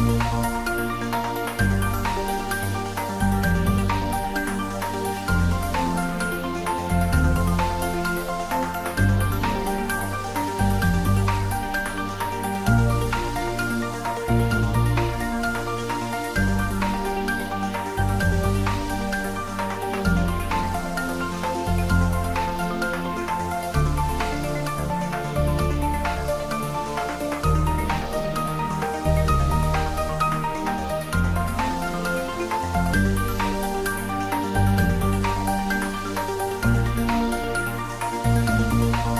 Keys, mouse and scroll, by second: 9.9 click, 13.1 click, 13.7-17.7 drag, 17.7 shift+d, 27.8 Up, 28.5 Right, 29.7 click, 30.5 `, 30.9 3, 32.5 scroll down 1, 37.2-39.1 drag.